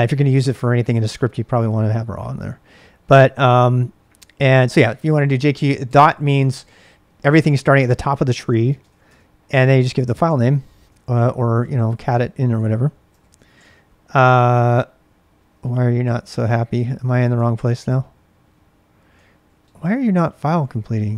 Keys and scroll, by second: 0.6 BackSpace, 8.5-11.5 typing, 11.5 Tab, 12.7-14.1 typing, 14.3 Tab, 14.5 Tab, 16.8 ctrl+c, 16.9-17.6 typing, 18.9-21.1 typing.